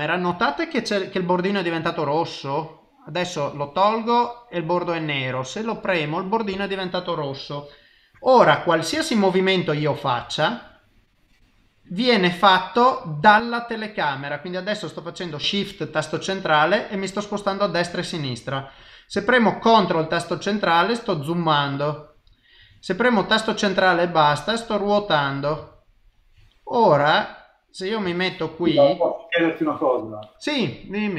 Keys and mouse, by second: 19.5 shift+middle click, 23.1 ctrl+middle click, 25.6 shift+middle click, 26.4 middle click, 28.1 shift+middle click.